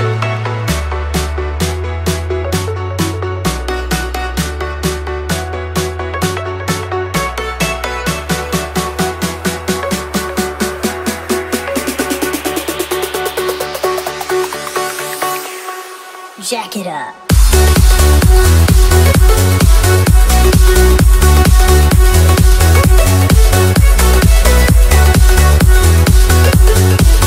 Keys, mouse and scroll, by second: 0.4 click, 0.6-1.1 typing, 1.7 click, 6.8-8.0 typing, 8.7 Return, 9.3-11.7 drag, 11.0-12.3 typing, 12.7 right click, 13.5 click, 14.5-16.0 typing, 16.8 Up, 17.9 Return, 19.2 click, 20.8 click, 22.8 ctrl+c, 22.9 click, 23.1 v, 23.5-24.7 drag, 26.1 ctrl+v, 26.6-27.2 drag.